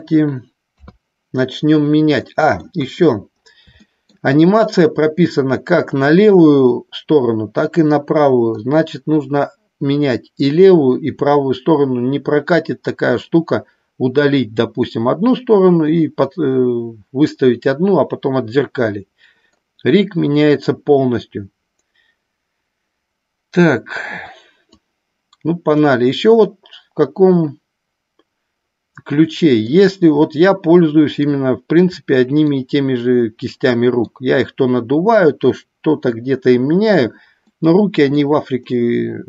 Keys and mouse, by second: 0.6 KP_3, 2.1 middle click, 2.8 KP_1, 3.8 shift+middle click, 24.6-25.9 drag, 26.4-29.6 middle drag, 30.1-31.1 middle drag, 32.0 middle click, 33.4 middle click, 37.4 middle click, 38.6-39.2 middle drag.